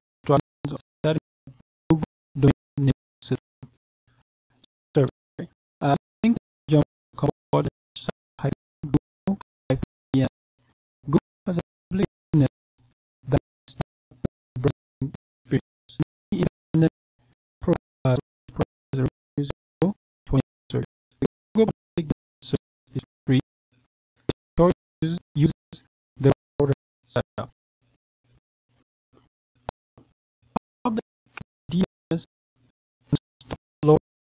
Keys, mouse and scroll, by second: 3.8 click, 17.6-25.8 scroll down 7, 25.8-28.4 scroll up 2, 33.3 click.